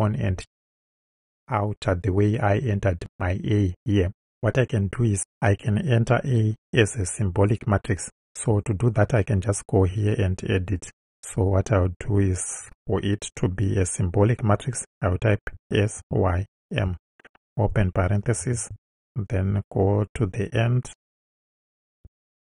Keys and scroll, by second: 12.0 Left, 15.6-18.5 typing, 20.5 Right, 22.1 Right.